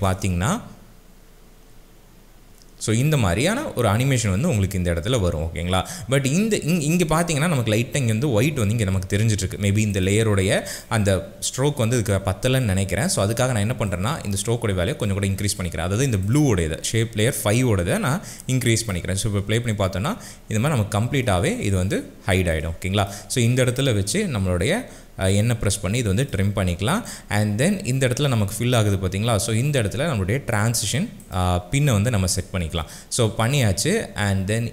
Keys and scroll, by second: 0.1 space, 2.8 space, 19.1 space, 24.2 n.